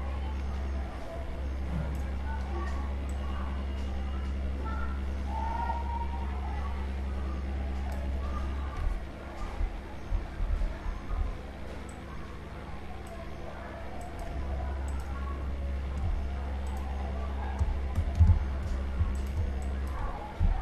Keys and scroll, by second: 13.5 ctrl+z.